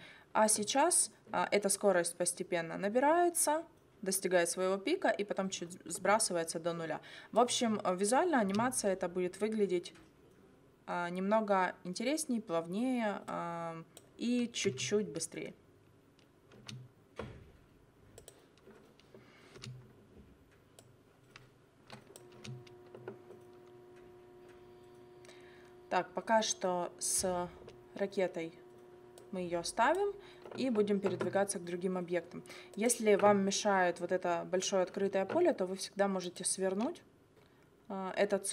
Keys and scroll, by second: 8.5 space, 14.7 space, 16.5 space, 19.5 space, 22.4 space.